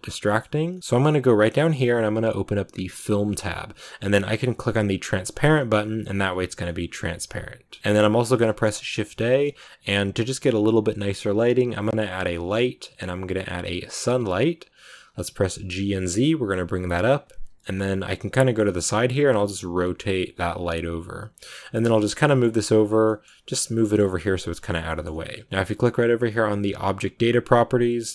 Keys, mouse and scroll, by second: 0.0 scroll up 1, 0.1-4.9 middle drag, 4.9 click, 6.6-14.0 middle drag, 14.6-15.4 scroll down 1, 15.4 g, 17.5-18.9 middle drag, 18.9 r, 21.7 shift+scroll down 1, 21.8 shift+middle click, 22.4 g, 22.9 middle click, 23.2 g, 23.6 middle click, 23.9 g, 24.5-28.1 shift+middle drag.